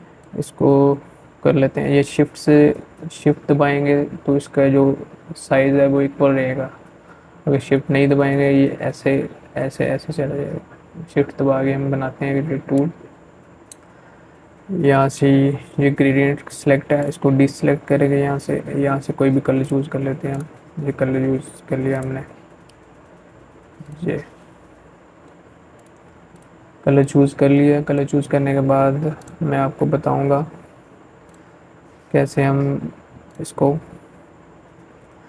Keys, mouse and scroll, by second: 12.9 click, 13.0 click, 17.4-27.0 drag, 28.1 ctrl+z, 29.1 click, 29.1 click.